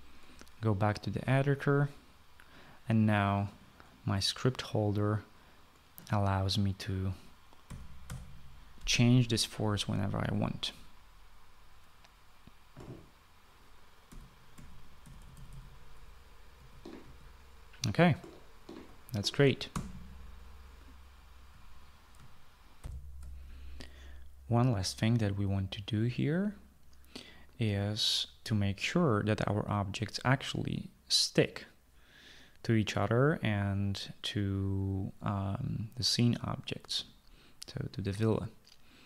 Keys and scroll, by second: 8.3-8.6 typing, 14.4-16.1 typing, 17.1-19.8 typing, 20.3 Escape, 23.6 shift+F9, 24.0 shift+F9.